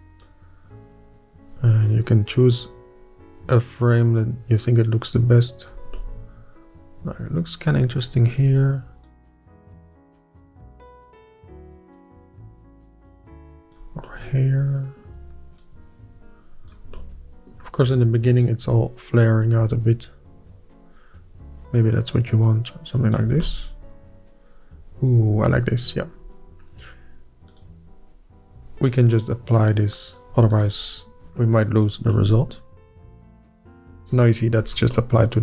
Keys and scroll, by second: 34.5 Tab.